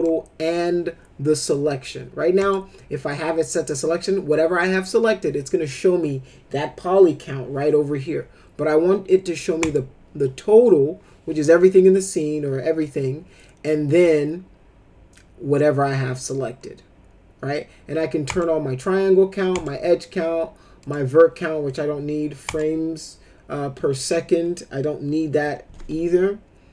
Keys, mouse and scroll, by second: 2.4 click, 9.6 click, 18.2 click, 19.5 click, 20.8 click, 22.4 click.